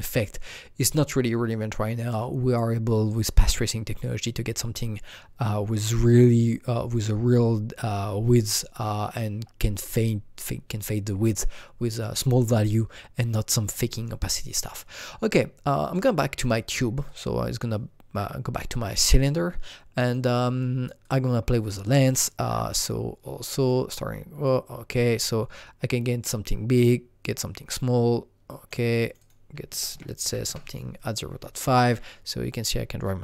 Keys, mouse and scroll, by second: 15.8 click, 17.1 click, 19.1 click, 21.0 click, 21.4-23.3 scroll down 1, 23.3 scroll down 3, 23.6 click, 24.4-29.7 drag, 29.7 KP_0, 29.9 double click, 29.9 KP_Decimal, 30.2 KP_5, 31.1 scroll down 2, 31.6-33.2 alt+middle drag.